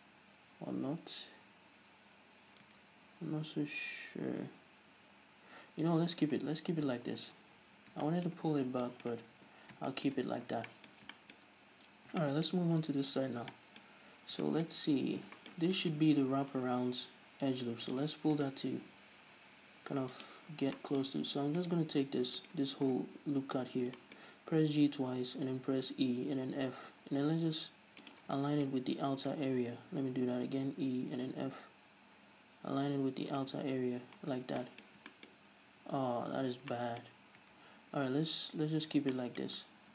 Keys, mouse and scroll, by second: 3.1 ctrl+z, 6.6 scroll down 2, 6.9 a, 7.4-7.8 scroll down 2, 7.8 a, 8.3 shift+middle click, 8.8 scroll down 2, 9.1-9.6 shift+middle drag, 9.6 Tab, 10.4 Tab, 10.4-16.0 middle drag, 10.5-10.9 scroll up 2, 11.6-12.1 scroll up 2, 12.1-12.4 scroll down 2, 14.2-14.6 scroll up 2, 15.1-15.6 scroll up 2, 16.0 right click, 16.5 g, 18.1 click, 18.6 right click, 18.9 g, 20.5 click, 20.8 scroll down 2, 21.0 shift+middle click, 21.8 alt+right click, 22.6 right click, 23.1-23.6 scroll down 2, 23.6-23.9 scroll up 2, 24.2-28.4 shift+middle drag, 24.4-25.0 scroll up 2, 25.0 scroll up 1, 25.1 g, 28.4 shift+click, 28.5 scroll down 2, 28.7-33.6 shift+middle drag, 29.1-29.7 scroll up 1, 29.7 ctrl+z, 30.5 g, 33.6 shift+click, 34.6-39.9 shift+middle drag, 34.6 scroll down 1, 37.9 ctrl+z.